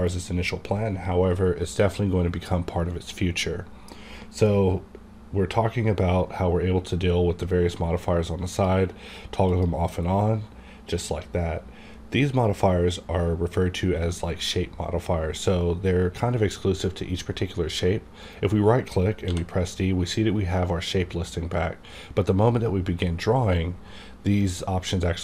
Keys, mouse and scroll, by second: 9.5 click, 19.3 right click, 19.3 d.